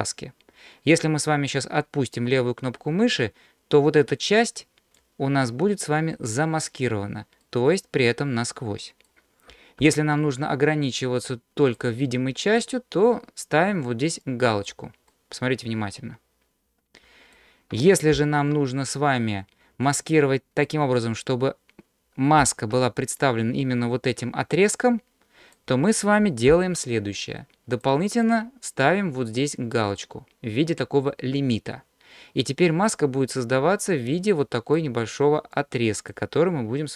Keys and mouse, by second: 7.4-9.1 middle drag, 9.8 ctrl+z, 11.6 click, 14.3 click, 15.2-16.3 middle drag, 16.3-17.4 drag, 18.2 ctrl+z, 20.1 click, 22.4 ctrl+z, 23.3-25.6 drag, 26.5 ctrl+z, 27.8 click, 28.3 drag, 32.6-34.8 drag, 35.6 click.